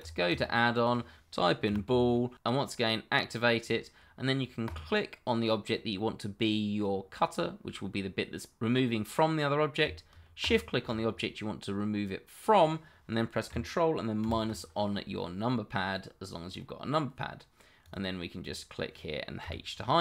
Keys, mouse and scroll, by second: 0.0 click, 0.4 double click, 1.6 b, 1.8 o, 3.6 click, 5.9 middle click, 10.4 shift+click, 14.2 ctrl+KP_Subtract, 15.4 middle click, 17.9 click, 19.4 h, 19.9 middle click.